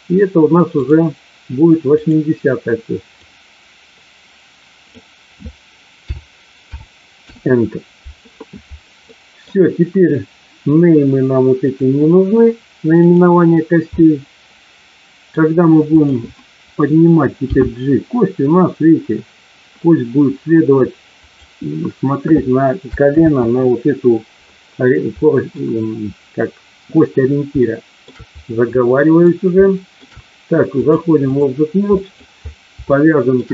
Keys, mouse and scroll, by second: 1.8 click, 9.0 middle click, 13.0 click, 13.8-15.3 middle drag, 17.5 g, 21.1 click, 23.1 ctrl+z, 25.1 middle click, 27.6 shift+middle click, 28.7 middle click, 29.6 shift+middle click, 30.7-31.3 drag, 32.0 middle click, 32.8-33.3 shift+middle drag.